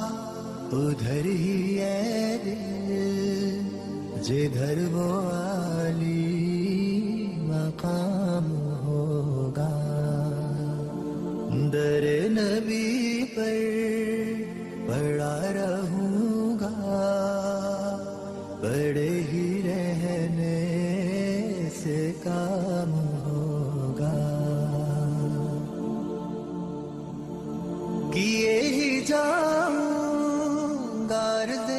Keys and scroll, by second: 18.6 F3, 23.6 F2, 27.9 ctrl+g, 28.4 F3.